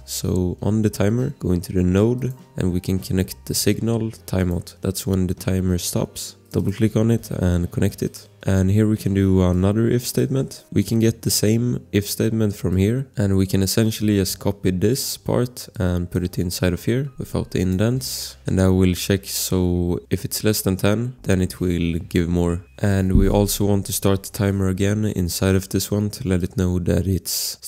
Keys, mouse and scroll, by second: 2.1 click, 9.5 click, 10.5 f, 12.7 click, 13.2 click, 14.1 ctrl+c, 15.7 click, 16.2 ctrl+v, 17.2 click, 17.2 BackSpace, 17.6 click, 17.8 BackSpace, 22.5 scroll, 23.9 Return, 26.4 click.